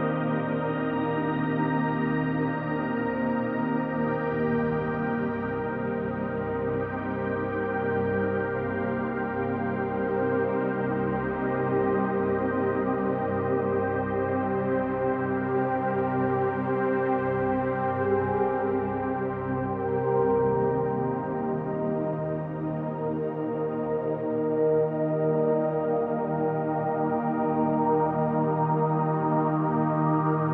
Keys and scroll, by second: 29.4 ctrl+alt+space.